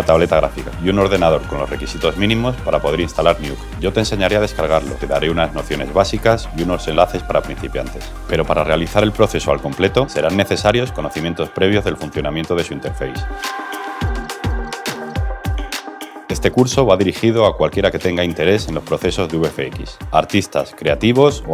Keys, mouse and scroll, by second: 12.2 click, 12.4 ctrl+v, 12.6 alt+middle click, 13.2 alt+middle click.